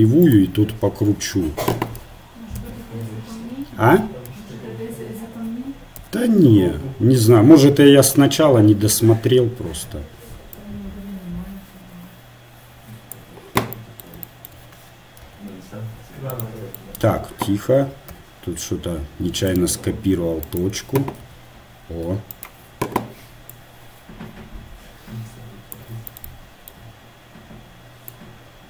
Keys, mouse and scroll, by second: 1.8-4.6 typing, 6.0 n, 10.6-12.4 drag, 15.3 g, 18.1 x, 20.5-23.5 right drag, 21.2 g, 23.5-25.5 drag, 26.1-28.1 middle drag, 28.1-28.6 right drag.